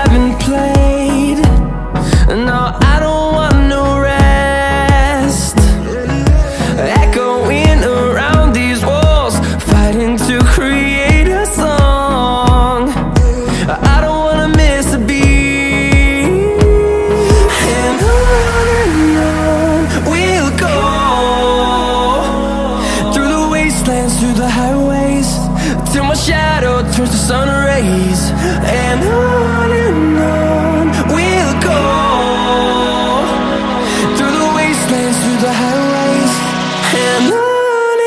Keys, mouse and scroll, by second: 3.0-4.3 scroll down 10, 4.4 middle click, 4.7 middle click, 5.0 middle click, 5.4 middle click, 5.7 middle click, 6.0 middle click, 6.4 middle click, 6.7 middle click, 7.0 middle click, 7.3 scroll down 2, 9.1 click, 10.0 click, 11.4 click, 12.5 click, 13.9-18.7 scroll down 22, 19.1-19.7 scroll down 4, 19.8-21.0 scroll up 8, 21.1 middle click, 22.5-23.0 scroll down 2, 25.2 click, 26.2 scroll down 1, 27.3 middle click, 34.3 click, 35.7 click, 37.2 click.